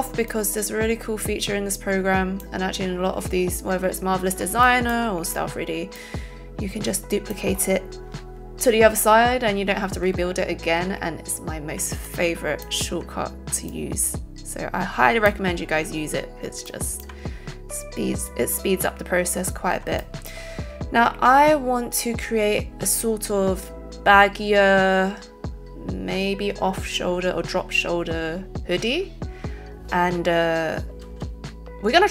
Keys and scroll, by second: 31.0 z.